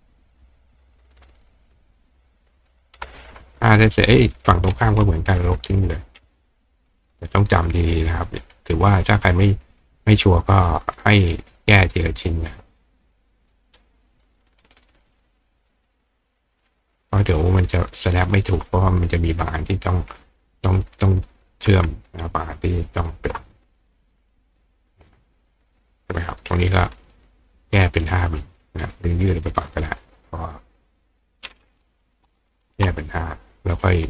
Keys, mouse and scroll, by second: 2.3 ctrl+click, 4.2-5.8 drag, 7.0 click, 9.1 ctrl+click, 11.0-13.8 ctrl+drag, 13.5 ctrl+right click, 15.4-18.0 ctrl+drag, 17.8-19.5 ctrl+right drag, 19.5 click, 20.2 click, 20.3 right click, 20.7 right click, 21.9 shift+click, 23.0 shift+click, 24.5 click, 25.0 click, 25.6 click, 26.4-27.2 drag, 29.0 click, 31.1 click.